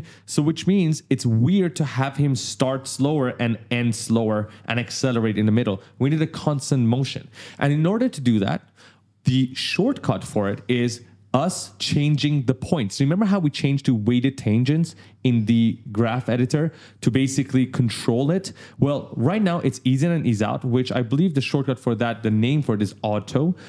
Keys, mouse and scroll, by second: 20.0 click.